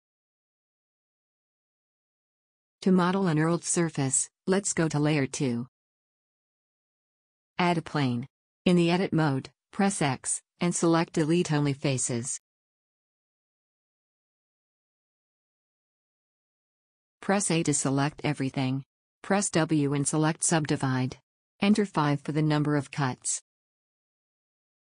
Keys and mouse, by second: 1.8 Tab, 4.4 shift+c, 5.1 KP_1, 5.3 KP_7, 7.8 shift+a, 11.6 Tab, 12.4 x, 16.7 a, 18.9 w, 21.1-22.2 drag.